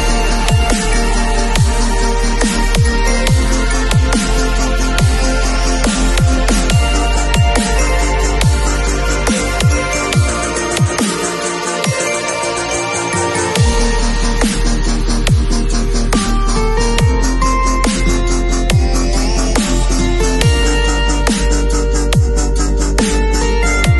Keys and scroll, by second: 11.5 v, 18.5 b, 19.4 x, 22.5 3.